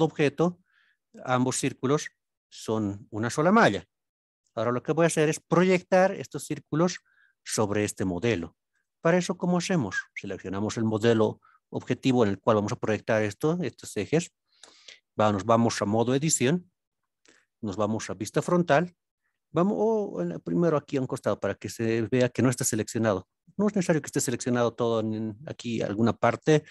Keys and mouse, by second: 0.0-0.5 middle drag, 4.6-5.3 middle drag, 5.9 middle click, 6.9 alt+z, 14.6 Tab, 17.3 KP_1, 19.6-20.4 middle drag, 20.9 middle click, 25.2 click.